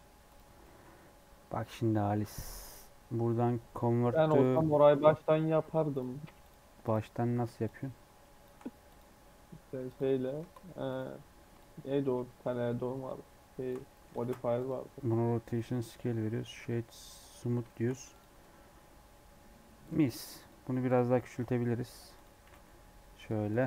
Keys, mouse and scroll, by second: 0.5 scroll down 2, 0.5 middle click, 0.8-2.1 scroll up 1, 2.1-13.8 drag, 13.8 middle click, 14.1 ctrl+a, 15.0 middle click, 15.4-17.5 right drag, 17.5 shift+middle click, 18.0 click, 18.3-19.4 middle drag, 19.4 scroll up 1, 19.7-21.1 drag, 21.1 s, 22.3 s, 23.4 click, 23.6 scroll down 1.